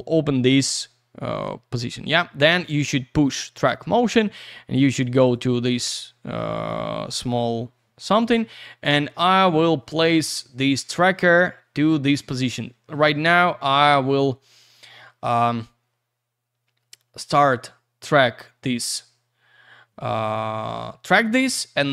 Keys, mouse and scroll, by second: 2.4 click, 2.5 click, 4.3-5.3 scroll up 1, 5.3 click, 5.8-11.1 scroll down 1, 18.4 click.